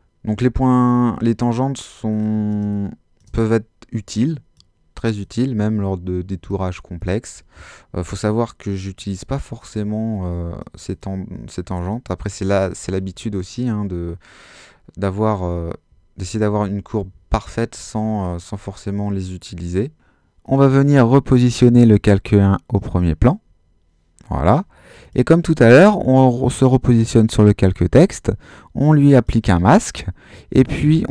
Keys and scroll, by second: 2.6 alt+space, 13.1 alt+space, 14.1 space, 16.5 super+z.